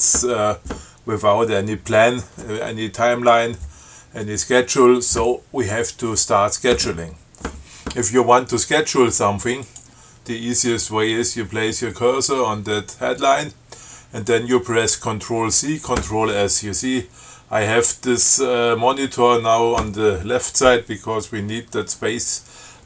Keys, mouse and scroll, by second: 9.9 click.